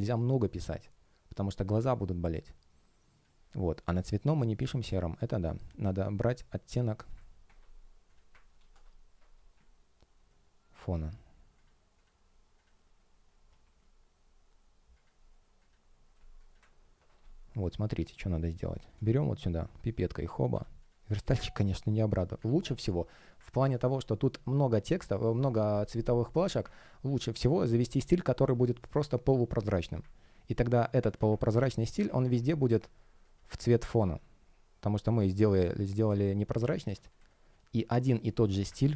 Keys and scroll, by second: 8.4 shift+super+t, 17.4 shift+o, 18.2 shift+o, 18.5 space, 22.3 super+z, 23.7 space, 31.4 alt+super+c, 32.1 alt+super+v, 33.9 alt+super+v, 35.2 alt+super+v, 35.5 space, 36.7 alt+super+v, 37.1 space.